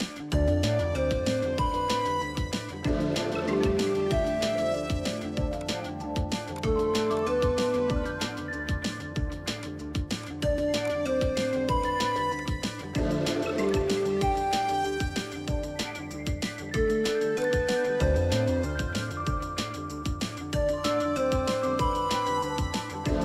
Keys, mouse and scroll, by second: 0.5 ctrl+v, 4.9 alt+scroll down 1, 5.1 ctrl+t, 7.5-8.3 alt+scroll up 1, 8.9-9.4 alt+scroll up 1, 9.4-10.1 alt+scroll down 1, 17.3 alt+click, 22.4-23.1 scroll down 1.